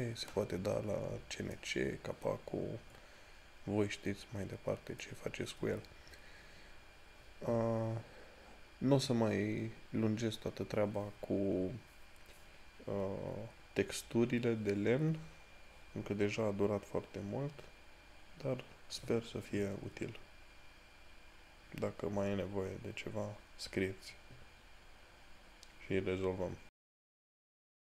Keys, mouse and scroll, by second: 3.0 scroll down 1, 9.0 scroll down 1, 27.9 click.